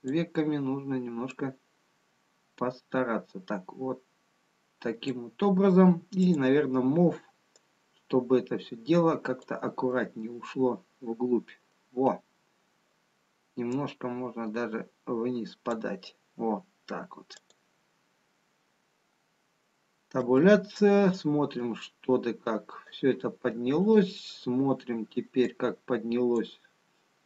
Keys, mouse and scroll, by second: 1.9 click, 9.0 click, 10.5 middle click, 14.0 click, 18.1 click, 20.6 Tab, 22.3 click, 24.1 click, 25.9 click.